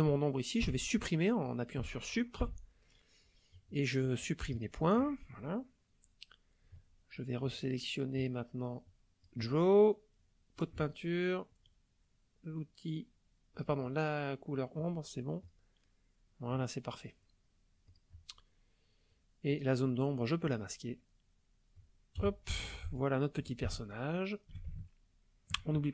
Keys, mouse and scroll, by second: 0.6 Delete, 2.4 Delete, 4.5 click, 8.2-9.4 drag, 10.2 click, 13.5 click, 15.5 click, 17.9 click, 19.5 click, 21.0 click, 22.2 KP_0, 22.9 ctrl+click, 23.7-24.7 ctrl+drag, 24.8 ctrl+shift+click.